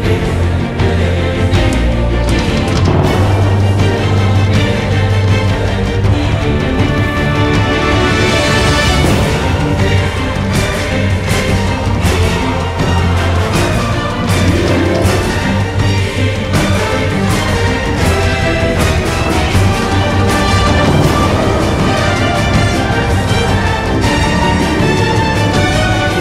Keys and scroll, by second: 3.0 ctrl+a, 7.4 t, 10.8-12.0 typing, 13.3 d, 19.3 ctrl+z, 22.7-26.1 typing.